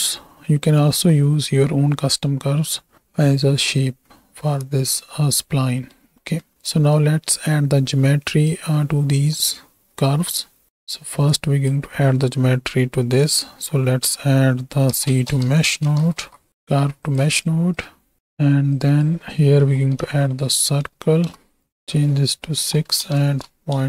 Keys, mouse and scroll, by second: 4.9 middle click, 5.7 middle click, 6.3 middle click, 6.5 right click, 6.9-8.6 right drag, 11.6-16.5 drag, 17.4 shift+click, 18.2 ctrl+x, 18.8-21.3 drag, 21.6-23.8 drag.